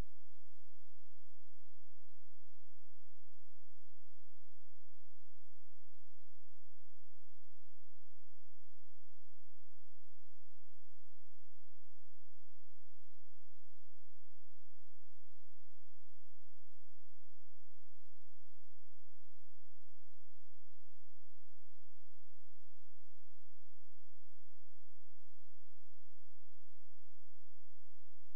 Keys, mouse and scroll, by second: 2.8 click, 3.1-3.5 scroll down 1, 3.5-4.5 scroll up 1, 4.5 click, 5.3 shift+click, 12.0 ctrl+z, 12.8 click, 12.9 click, 14.4-14.8 scroll down 1, 14.8-16.6 scroll up 1, 16.7 click, 17.9 ctrl+z, 19.3 shift+click, 24.1 shift+click.